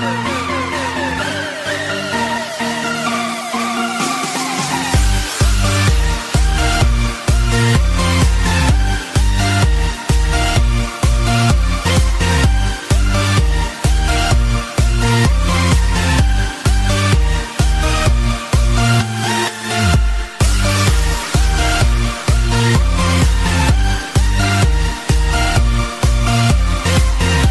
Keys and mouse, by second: 16.2 click, 17.1 click, 20.4 click, 21.2 i, 22.8 click, 27.1 click.